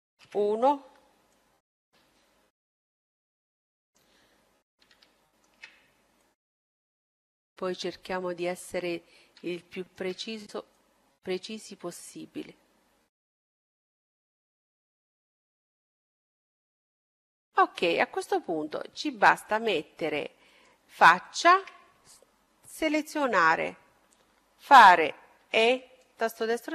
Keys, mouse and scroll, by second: 0.2 KP_1, 1.4-3.3 drag, 4.2-7.0 middle drag, 6.2-8.0 drag, 9.0-11.5 middle drag, 10.7-12.6 drag, 15.9-18.6 middle drag, 19.4-21.3 drag, 20.4-22.8 right drag, 22.7-24.4 middle drag, 25.4 e, 26.6-26.7 drag.